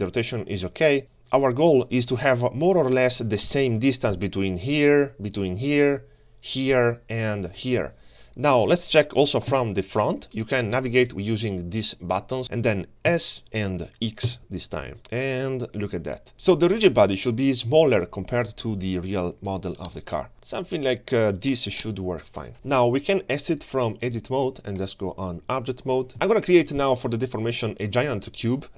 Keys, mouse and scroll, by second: 9.5 KP_1, 11.8 click, 13.0 s, 22.5-23.6 scroll down 2, 22.5 KP_3, 23.6-26.1 drag, 26.1 ctrl+space, 26.8 shift+right click, 28.7 ctrl+shift+a, 28.7 click, 28.7 scroll down 2.